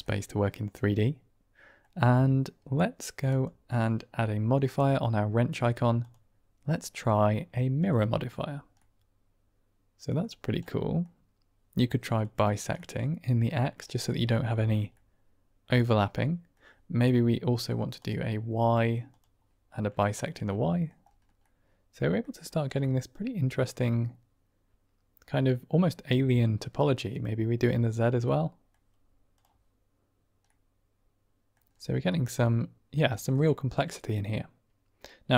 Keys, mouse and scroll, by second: 0.3-1.7 middle drag, 3.3 click, 6.0-7.9 drag, 8.7-9.2 middle drag, 9.2-10.1 drag, 10.6 click, 10.8 typing, 10.9 middle click, 12.7-13.4 middle drag, 13.8 middle click, 14.8-16.5 middle drag, 19.3 click, 20.1-20.8 middle drag, 21.3-22.2 middle drag, 22.8-26.2 middle drag, 28.2-28.7 middle drag, 30.0 click, 30.3-31.4 middle drag, 32.0-32.9 middle drag, 33.0 ctrl+middle drag, 33.3-35.0 middle drag.